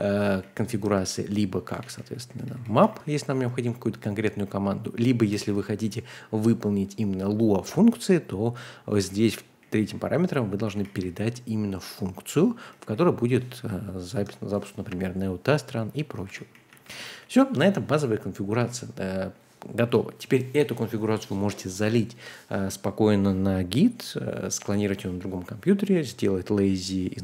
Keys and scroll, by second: 0.2-6.4 typing, 3.5 Escape, 8.9-12.8 typing, 14.1 Escape, 16.0-17.2 typing, 18.3-18.7 typing.